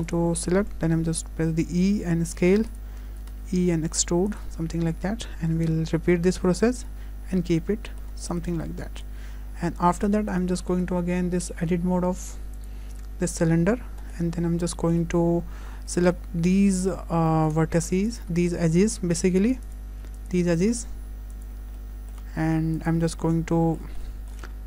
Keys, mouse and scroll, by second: 0.1 click, 1.2 e, 3.2 e, 6.0 shift+r, 6.4 shift+r, 6.8 Tab, 7.0-7.7 scroll down 4, 7.4 middle click, 8.3 shift+middle click, 8.6 scroll down 1, 8.6 middle click, 9.6 `, 10.3 scroll up 2, 10.6 shift+middle click, 12.6 click, 13.3 Tab, 14.4 scroll up 4, 14.7 shift+middle click, 18.1 alt+click, 21.8 middle click.